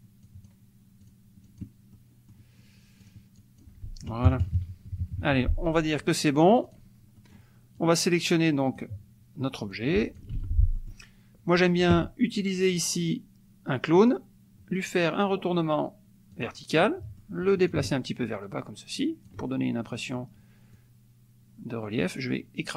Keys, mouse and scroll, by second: 0.2 click, 1.1 click, 1.9 middle click, 3.0 click, 3.4 click, 4.2 KP_Subtract, 5.3 F1, 6.5 click, 7.1 middle click, 7.7-9.0 drag, 9.8 click, 10.3 ctrl+z, 10.7 ctrl+click, 14.0 click, 16.3 click, 16.8 click, 17.6-19.5 ctrl+drag, 20.7-22.7 drag.